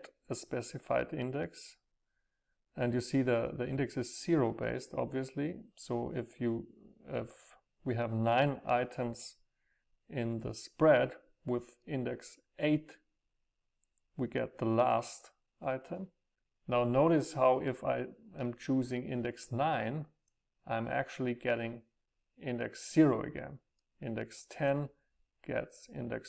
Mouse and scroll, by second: 0.6-2.5 middle drag, 0.6-1.9 scroll up 2, 1.9-2.3 scroll up 1, 2.3 scroll down 2, 6.5-8.0 middle drag, 6.5-8.0 scroll up 2, 8.0-9.0 scroll up 1, 9.0 scroll up 1, 11.9-13.0 scroll up 4, 13.6 scroll up 2, 13.7-15.9 middle drag, 18.7-21.6 middle drag, 24.0-26.1 middle drag.